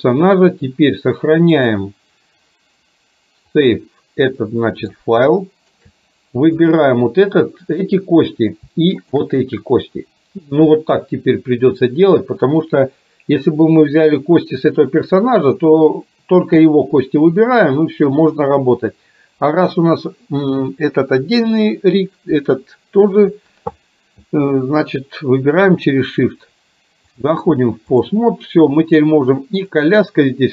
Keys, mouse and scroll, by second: 1.6-4.1 drag, 4.5-5.0 middle drag, 5.4-5.7 shift+middle drag, 9.0 shift+click, 27.2-28.2 drag.